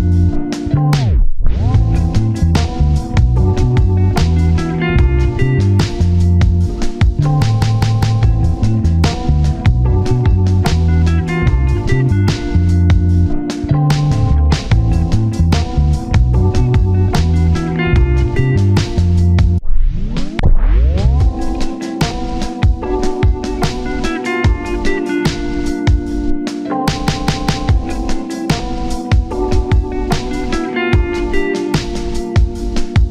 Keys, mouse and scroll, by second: 12.2-13.2 scroll down 1, 13.2 double click, 16.4-16.9 scroll up 1, 19.0 1, 19.7 scroll up 1, 20.0 scroll down 1, 20.9-21.6 scroll up 1, 21.6 middle click, 22.2-22.5 scroll down 1, 22.6 middle click, 23.0 scroll down 1, 23.1 middle click, 23.3 scroll up 1, 23.4 scroll down 1, 23.6 middle click, 24.1-24.6 scroll up 2, 24.2 middle click, 24.6-25.0 scroll down 1, 25.3 middle click, 26.6-27.2 scroll down 2, 26.9 middle click, 27.2-28.1 scroll up 1, 28.1 scroll down 1, 28.3 ctrl+z, 29.6 double click, 32.1-32.6 scroll up 1, 32.6 scroll down 1.